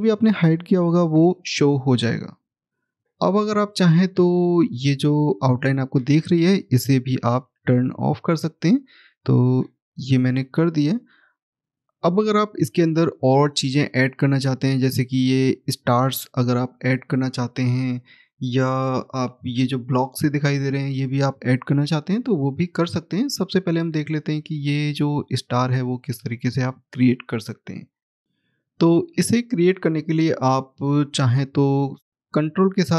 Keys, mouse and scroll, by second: 0.3 click, 3.8 scroll up 1, 5.5 click, 7.5 right click, 10.5 click, 10.9 scroll down 1, 13.2 middle click, 14.2 middle click, 14.3 scroll up 1, 16.2 scroll down 1, 17.2 middle click, 19.5-21.5 scroll up 1, 24.4 middle click, 30.6 click.